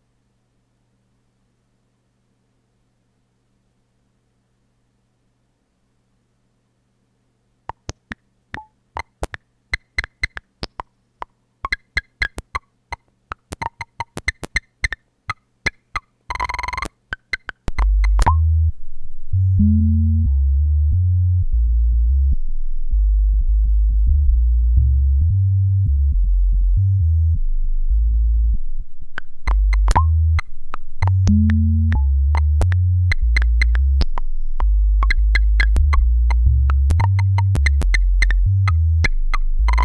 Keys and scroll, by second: 1.1-1.8 typing, 7.7 space.